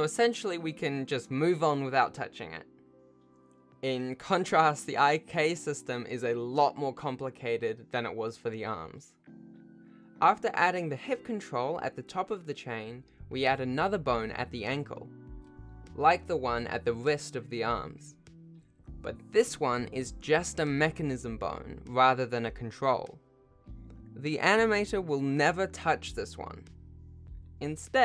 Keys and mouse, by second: 0.1 alt+a, 0.1 ctrl+s, 0.1 shift+click, 2.4 shift+middle click, 6.7 shift+middle click, 7.9 click, 8.1 click, 8.7 shift+middle click, 10.5 e, 12.0 click, 13.0 F2, 13.8 alt+a, 14.0 e, 16.3 click, 18.3 F2, 20.2 o, 25.0 shift+middle click, 25.8 shift+middle click, 26.1 ctrl+Tab, 26.5 click, 27.8 ctrl+shift+Tab.